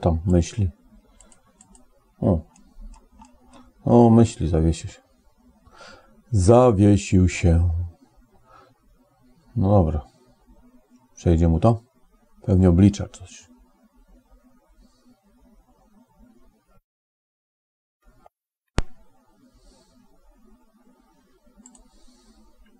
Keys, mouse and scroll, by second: 17.1 click, 21.4 click.